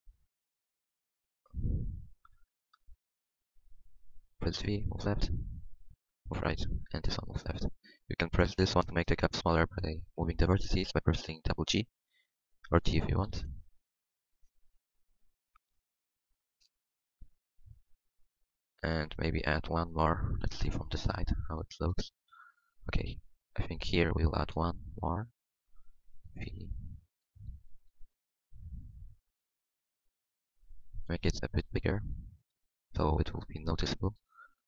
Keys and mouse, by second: 4.3 v, 4.9-6.1 drag, 6.1 v, 6.1 g, 6.7-8.2 drag, 10.6 g, 12.7 g, 20.4 KP_3, 24.4 middle click, 26.2 v, 28.1 click, 28.1 g, 31.0 g.